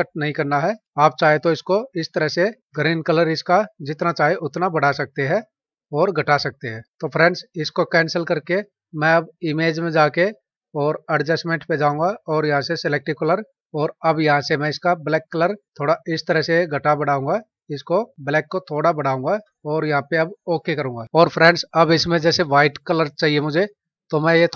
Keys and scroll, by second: 2.0 space.